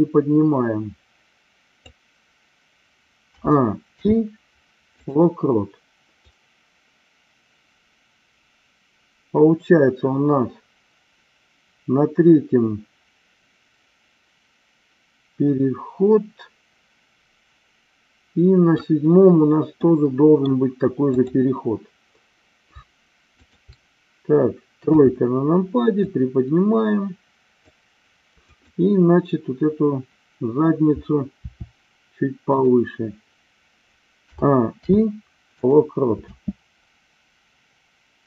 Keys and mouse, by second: 3.2 a, 3.8 i, 6.3-18.9 drag, 19.6-20.5 middle drag, 21.1-22.1 drag, 23.3 shift+click, 24.9 KP_3, 26.1-27.7 drag, 28.4 click, 31.4 r, 32.6 click, 34.2 a, 34.8 i, 36.2 space.